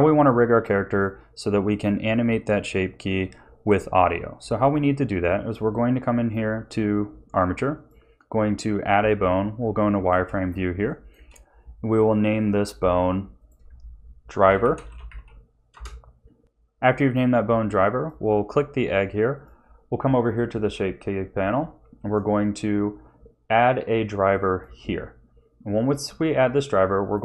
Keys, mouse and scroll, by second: 4.5 shift+a, 8.9 z, 9.8 shift+middle click, 10.4 scroll up 2, 11.0 shift+middle click, 12.7 click, 13.4 click, 17.9 click, 19.3 click, 22.0 right click.